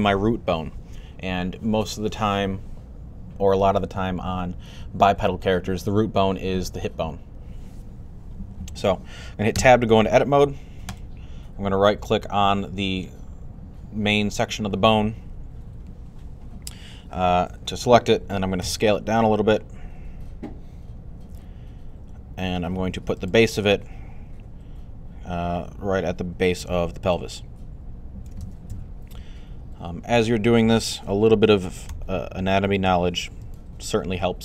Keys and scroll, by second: 18.5 s, 28.5 3, 31.7 g.